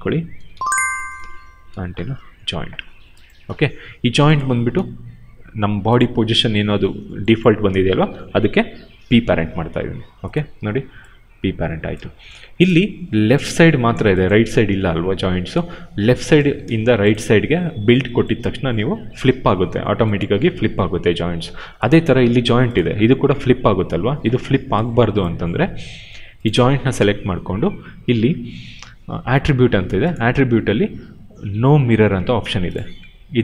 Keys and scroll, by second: 0.3 ctrl+c, 1.8 ctrl+v, 3.7 q, 8.9 p, 10.5 e, 11.8 ctrl+z, 12.1 q.